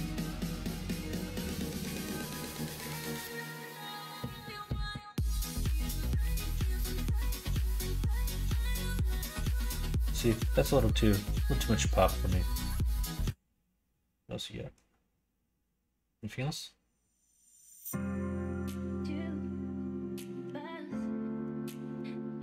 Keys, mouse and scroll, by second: 0.4 click, 0.9 middle click, 1.6 Tab, 2.3 middle click, 4.0 middle click, 4.8 click, 6.1-8.3 typing, 18.4 middle click, 18.9 middle click, 20.3 l.